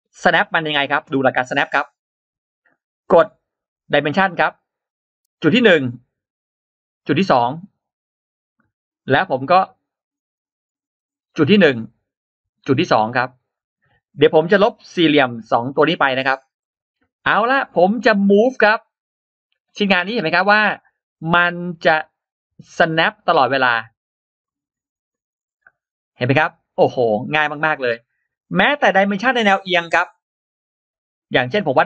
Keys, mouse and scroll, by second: 1.2-1.5 scroll down 1, 1.5-1.8 scroll up 1, 3.8 space, 5.2 click, 7.2 click, 8.2 click, 8.5-8.8 scroll down 2, 8.9 scroll up 2, 12.4 click, 13.4 click, 13.6-13.9 scroll down 1, 15.1 click, 16.4-18.3 typing, 16.5-16.8 scroll up 1, 17.4 click, 18.3 click, 19.5-19.9 scroll down 1, 19.9 scroll up 1, 20.4 click, 21.5 click, 22.0 click, 23.2 click, 24.3 click, 24.9 click, 26.0 click, 26.8 click, 28.4 click, 30.3-31.4 drag.